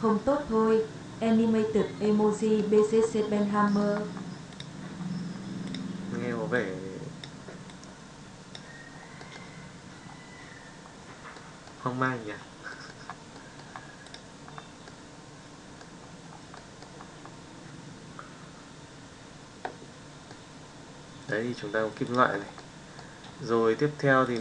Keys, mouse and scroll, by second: 2.5 middle drag, 3.6 middle drag, 4.5 click, 9.1 middle drag, 11.3-11.7 middle drag, 12.7-13.0 middle drag, 13.3 middle drag, 14.0 click, 14.8-15.8 middle drag, 16.5 middle drag, 20.2-21.4 middle drag, 22.5-23.0 middle drag, 24.2 click.